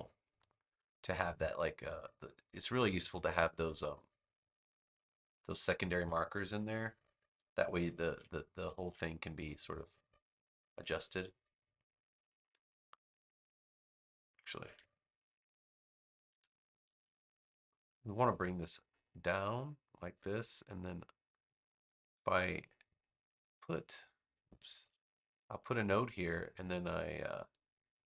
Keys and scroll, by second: 3.2 a, 7.9 super+z, 8.7 super+z, 14.6 super+z, 16.2 super+z, 16.8 super+z, 24.6 super+z.